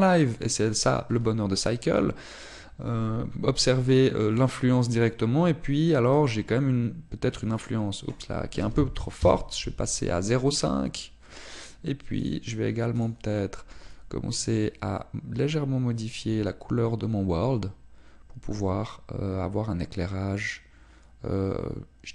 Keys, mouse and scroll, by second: 7.4 click, 8.6 click, 14.9 click.